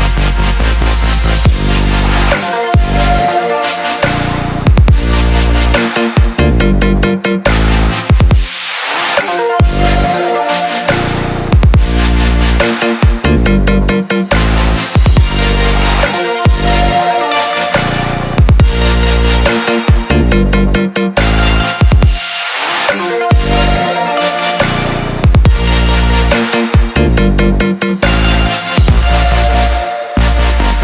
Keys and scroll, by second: 25.0 ctrl+j.